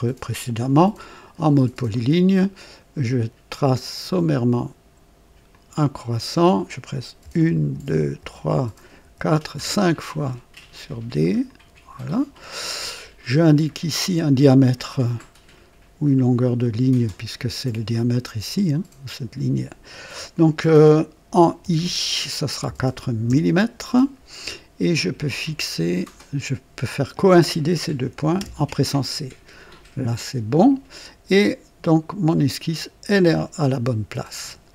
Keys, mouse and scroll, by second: 0.9 click, 1.9 right click, 4.0 click, 5.5 click, 7.2-9.5 typing, 11.4 click, 12.8 scroll up 1, 13.8 right click, 13.8 middle click, 15.1 middle click, 19.0 click, 21.6 i, 22.6 KP_4, 23.2 Return, 25.4 click, 26.8 click, 28.3 c, 30.5 click, 33.6-34.7 right drag.